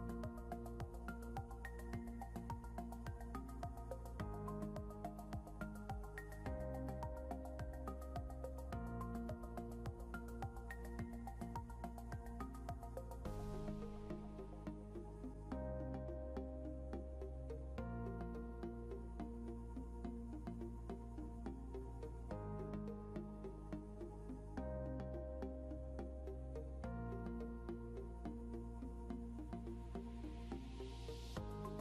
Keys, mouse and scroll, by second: 1.1 click, 13.5 scroll down 1, 14.9 scroll up 1, 16.1 click, 29.2 Right, 29.8 Down.